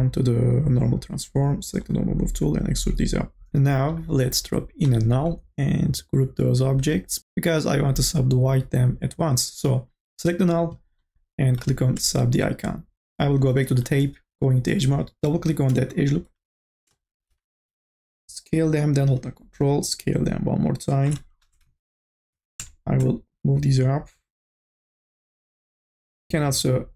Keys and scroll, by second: 15.8 e, 17.6 t, 22.3 e, 25.2 ctrl+z.